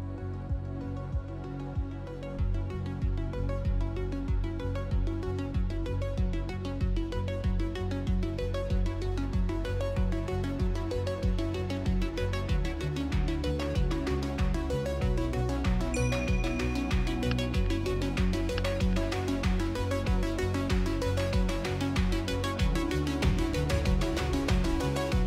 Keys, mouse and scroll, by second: 0.7 click, 1.2 click, 1.7 shift+click, 1.9 shift+x, 2.4 click, 3.4 s, 4.0-4.6 scroll down 4, 4.6 middle drag, 4.8 s, 6.2 KP_1, 6.7-7.1 scroll up 2, 7.1 g, 8.6-9.2 middle drag, 9.2 Tab, 9.7 right click, 10.7-12.3 drag, 12.8-13.8 drag, 14.0 Tab, 15.6-16.8 drag, 16.8-17.2 scroll up 2, 17.2 shift+middle click, 17.8 ctrl+z, 18.4 click, 18.9-22.6 drag, 22.6-23.2 f, 23.4-24.9 drag, 24.9 middle click.